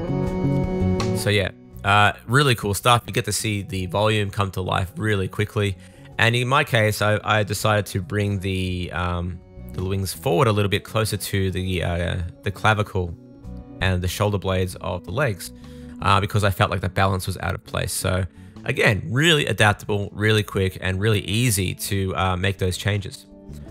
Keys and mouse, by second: 0.0 middle click, 1.1 middle click, 20.2 KP_3, 20.8 Tab, 21.6 super+s, 22.0 click, 22.6 click, 23.3 click, 23.5-23.7 shift+drag.